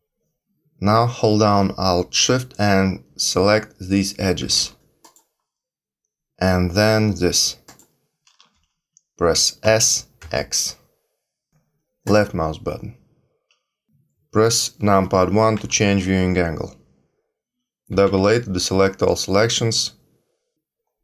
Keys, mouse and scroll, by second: 5.0 alt+shift+click, 7.6 alt+shift+click, 9.6 s, 11.5 s, 15.5 KP_1, 17.9 a, 18.0 a.